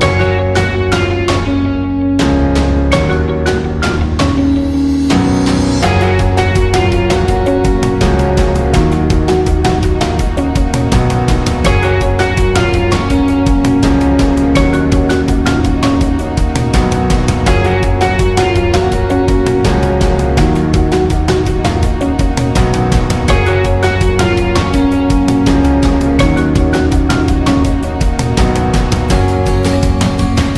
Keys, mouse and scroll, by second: 0.0 click, 0.6 scroll down 1, 0.7 space, 2.0 alt+scroll down 1, 2.3 space, 2.4 click, 3.2 alt+scroll up 1, 3.4 space, 3.5 click, 5.8-11.4 alt+shift+drag, 11.8 alt+scroll down 1, 12.0 space, 12.2 click, 12.5 space, 13.0 alt+scroll up 1, 13.2 space, 13.3 click, 13.7 space, 15.0 alt+scroll up 1, 15.9 alt+scroll down 1, 16.2 space, 16.3 click, 16.9 alt+scroll up 1, 17.1 space, 17.2 click, 17.6 space, 19.5 space, 20.8-24.0 drag, 24.2 right click, 25.4 click, 26.8 right click, 28.1-30.5 drag.